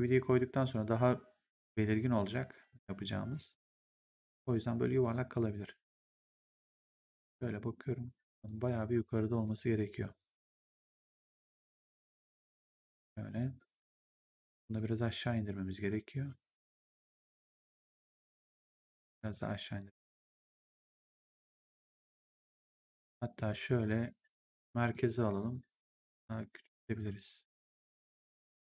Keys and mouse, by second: 3.4 right click, 3.9 3, 4.3 click, 4.9 ctrl+1, 8.3 click, 8.5 1, 9.2 right click, 9.6 click, 14.1 click, 15.7 click, 18.2 click, 22.8 right click, 23.2 r, 24.7 click, 25.8 click.